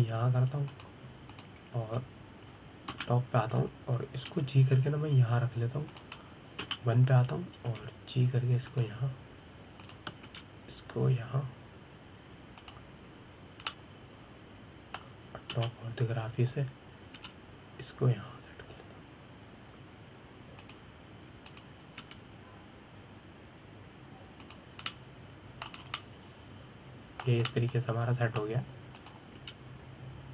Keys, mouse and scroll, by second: 0.5 g, 3.0 click, 4.6 KP_7, 5.9 g, 8.3 KP_1, 9.3 g, 11.5 click, 12.0 g, 15.4-17.2 middle drag, 17.2 KP_7, 18.8 g, 23.1 click, 23.7 g, 26.5-27.5 middle drag, 27.5 scroll up 2, 27.6-30.3 middle drag.